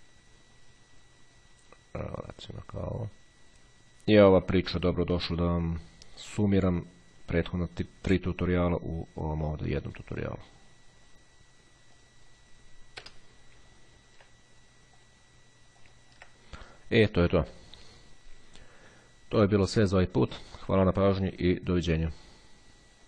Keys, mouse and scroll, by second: 12.2 click, 13.2 Delete, 15.2 click, 15.9 click.